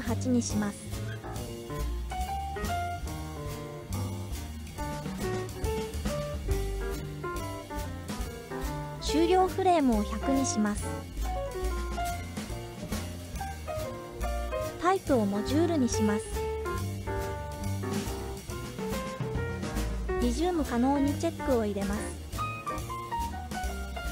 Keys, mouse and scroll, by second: 4.2-5.9 drag, 6.1 click, 8.0-8.4 scroll down 1, 8.9 scroll down 4, 10.2-13.4 drag, 12.1 KP_0, 15.2-16.8 drag, 19.2-19.7 scroll down 1, 20.1-20.9 scroll down 2, 20.9 click, 22.9-24.1 scroll up 5.